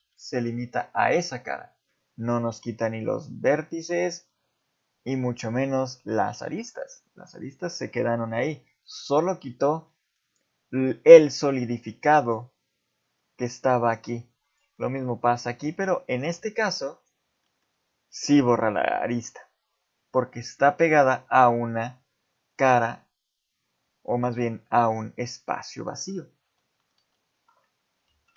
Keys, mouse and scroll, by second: 1.6 middle click, 8.2 middle click, 9.9 middle click, 11.9 middle click, 14.4 click, 14.8 middle click, 15.0 z, 16.3 x, 17.4 middle click, 20.9 middle click, 24.1 middle click, 26.5 z.